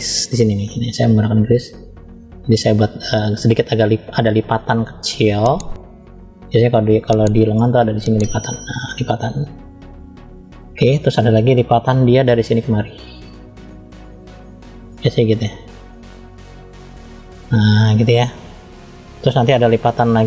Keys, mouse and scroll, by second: 1.3 click, 2.9 scroll down 1, 3.7 middle click, 3.7-4.2 scroll down 1, 4.9 f, 7.4 click, 12.4 click, 15.3 click, 16.8 click.